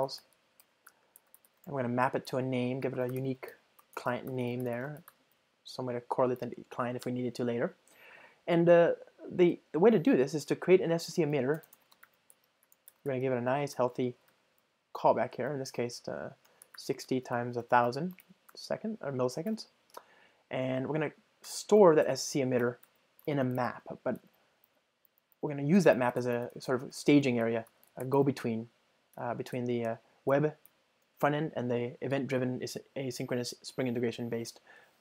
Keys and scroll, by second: 3.9 Return, 11.3 Return, 15.4 super+p, 21.8 Return, 30.4 Return.